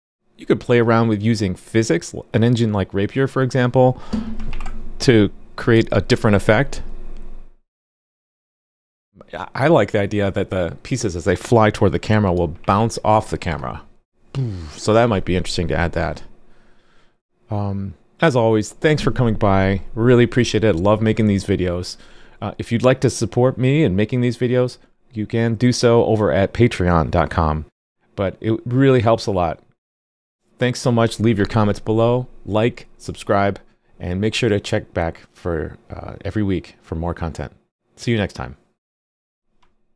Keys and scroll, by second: 4.5 super+r, 12.6 super+r.